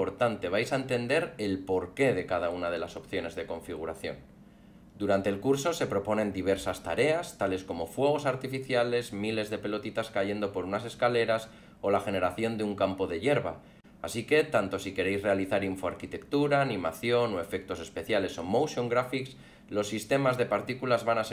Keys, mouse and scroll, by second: 0.1 click, 0.2 click, 0.3 click, 0.5 alt+middle click, 1.4 middle click, 1.6 alt+middle click, 2.0 click, 2.4 click, 2.5 click, 2.6 click, 2.7 click, 2.9 click, 3.1 click.